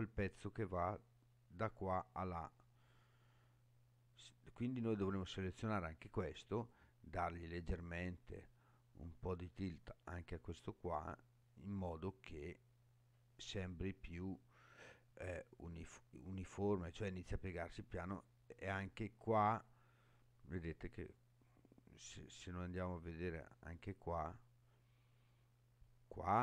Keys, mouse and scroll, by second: 2.1-3.5 middle drag, 4.3 click, 6.7-11.9 drag, 12.3-13.4 middle drag, 13.6-14.2 scroll down 4, 14.3-19.6 middle drag, 22.0-22.9 scroll up 5, 22.9-25.3 middle drag, 25.7-26.4 middle drag.